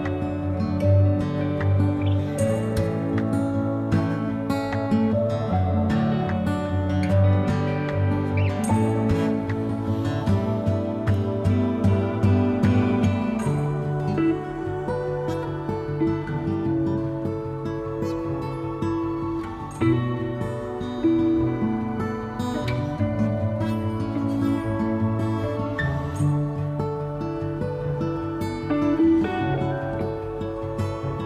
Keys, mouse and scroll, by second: 1.4 g, 5.2 click, 5.5 g, 9.1 g, 12.2 KP_7, 14.0 g, 14.9-19.7 middle drag, 19.7 click, 19.8-29.3 middle drag, 20.8 g, 23.8 a, 24.0 a, 27.0 a, 27.2 a, 27.8 a, 29.3 ctrl+a, 29.5-31.2 middle drag, 31.2 click.